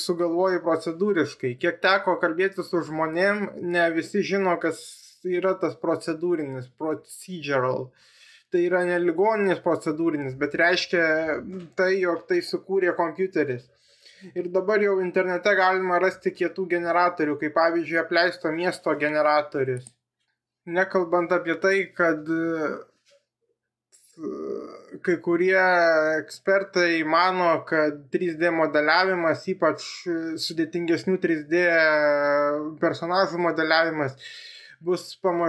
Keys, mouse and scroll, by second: 27.5-29.4 middle drag, 32.1-35.4 drag.